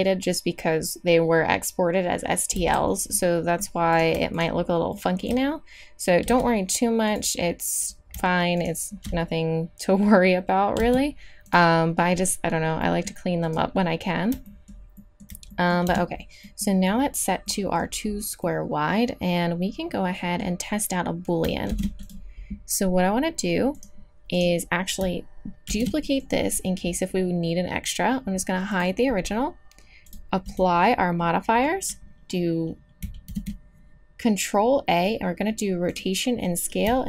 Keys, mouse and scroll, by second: 2.5 f, 6.3 x, 10.8 x, 15.9 Tab, 21.7 ctrl+s, 23.8-24.8 drag, 25.7 shift+d, 28.7-29.1 drag, 30.2-32.4 drag, 33.3 ctrl+a.